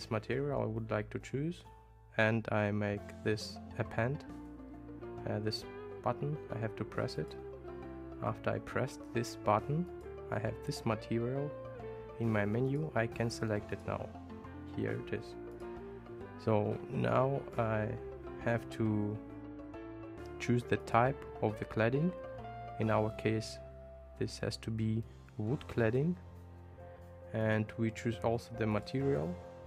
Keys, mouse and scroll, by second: 7.2 click, 9.9-12.9 drag, 13.8-15.7 drag, 20.9-26.1 drag, 27.5-28.9 drag.